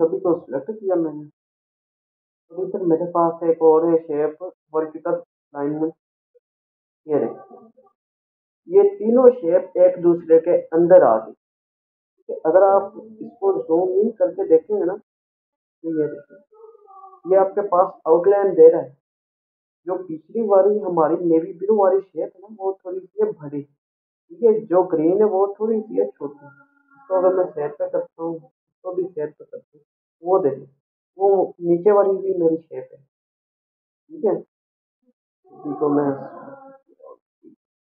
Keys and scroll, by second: 1.3 ctrl+a, 37.5 ctrl+a.